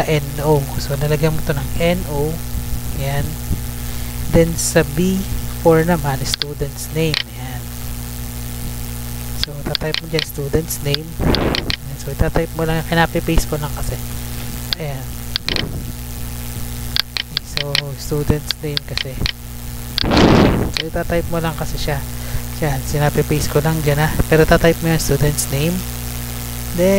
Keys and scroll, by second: 0.4 Tab, 1.5-2.5 typing, 2.7 Right, 4.0 Tab, 7.2 ctrl+c, 7.8 Tab, 9.9 ctrl+v, 10.7 Return, 13.9 ctrl+z, 14.6 ctrl+v, 17.8 ctrl+z, 19.4 ctrl+z, 21.9 F2, 22.3 ctrl+v, 23.3 Up, 23.4 Right, 24.0 Return, 24.3 Up, 24.4 Right, 25.1 Tab.